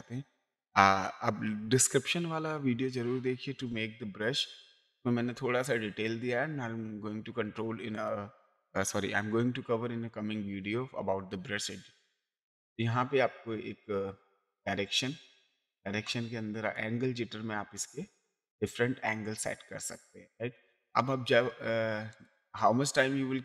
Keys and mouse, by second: 4.6 click, 7.9 click, 14.5 click, 16.7 click, 22.1 click.